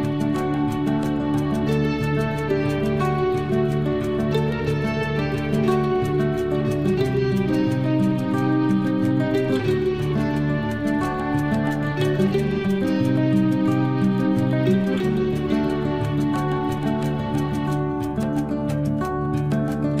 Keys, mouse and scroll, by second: 0.2 click, 0.8 space, 2.2 l, 6.2 space, 7.9 l, 9.0 click, 10.3 space, 11.4 l, 12.5 click, 13.6 space, 14.4 l, 15.4 click, 15.5 click, 16.8 space, 17.6 l, 19.1 click.